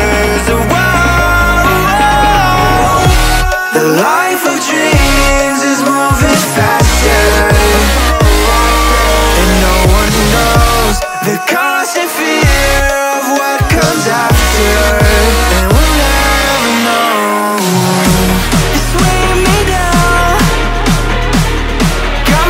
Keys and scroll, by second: 1.4 ctrl+y, 3.4 ctrl+t, 7.0 Return, 7.3 Right, 7.6 Up.